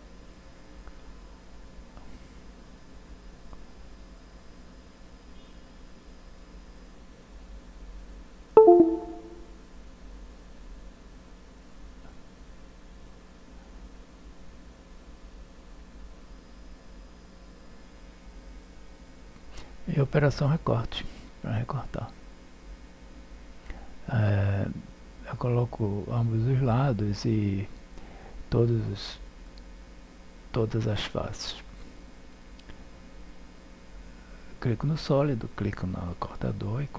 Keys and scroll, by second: 0.6 o, 1.7 Return, 4.4 7.